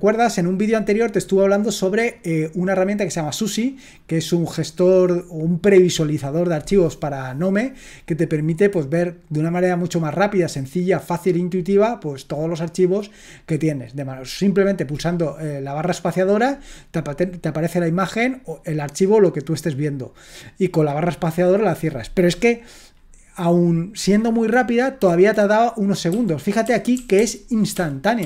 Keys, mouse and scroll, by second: 26.1 Up, 26.6 Up, 27.0 Up, 27.1 Up, 27.7 Up.